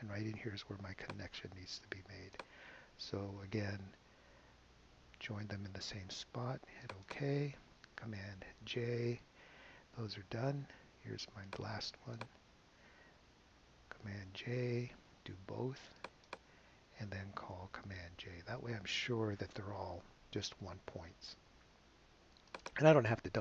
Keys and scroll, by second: 4.9 alt+super+j, 8.8 super+j, 14.0 alt+super+j, 18.5 super+j.